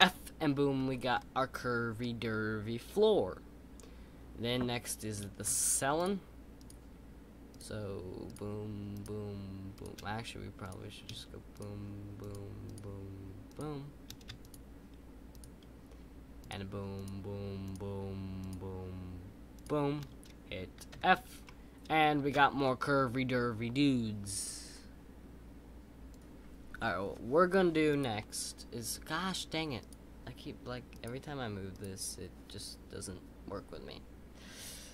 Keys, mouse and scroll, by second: 1.1-4.2 middle drag, 5.9 shift+click, 10.6 click, 11.5 shift+click, 21.4-24.5 middle drag.